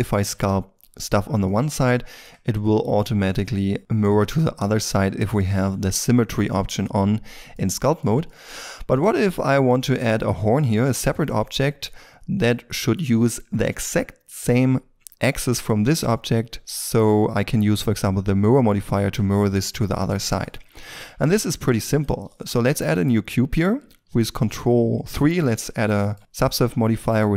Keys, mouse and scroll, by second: 0.1 middle click, 7.1-7.5 scroll down 1, 7.5 middle click, 8.2 shift+middle click, 9.9-11.6 scroll up 1, 11.6 middle click, 18.9-19.3 scroll down 1, 19.3 shift+middle click, 19.6 shift+scroll down 2, 20.1 middle click, 20.4-20.8 scroll down 1, 20.8 shift+middle click, 21.1 shift+scroll up 1, 22.2 shift+a, 25.0 ctrl+3, 25.6-25.9 scroll up 1, 25.9 shift+middle click, 26.8-27.3 scroll up 1.